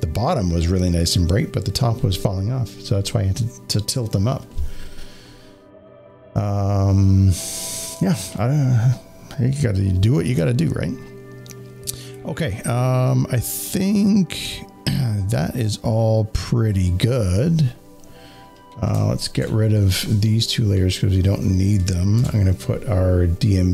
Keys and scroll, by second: 10.3 space, 10.6 space, 22.1 ctrl+F6.